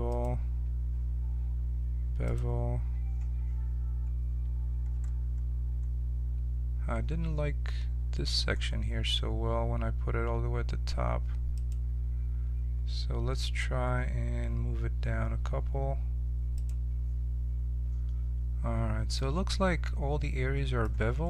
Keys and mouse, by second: 0.1-4.9 drag, 4.9-7.3 middle drag, 8.3 middle click, 11.5-14.0 drag, 16.5-19.1 drag, 21.0 middle click.